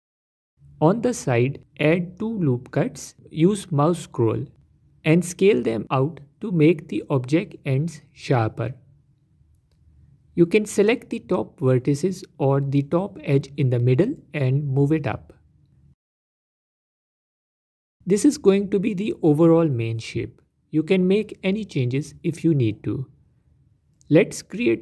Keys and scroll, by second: 3.5 ctrl+r, 12.8 Tab, 21.4 Tab, 21.8 Tab.